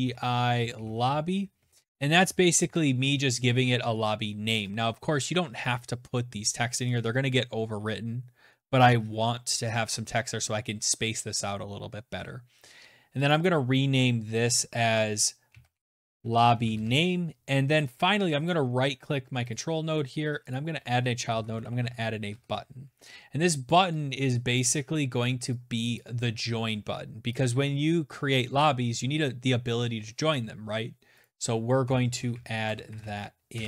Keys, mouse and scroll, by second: 0.0-1.7 typing, 4.6 shift+click, 5.5-6.3 typing, 5.7 shift+click, 12.3 click, 12.4 click, 14.2-17.1 typing, 16.8 right click, 17.4 click, 18.5 right click, 18.5 typing, 19.5 click, 20.0-21.3 typing, 23.6 click, 24.9 click, 26.3 shift+click, 30.2 click, 31.1-32.4 typing, 32.5 Return.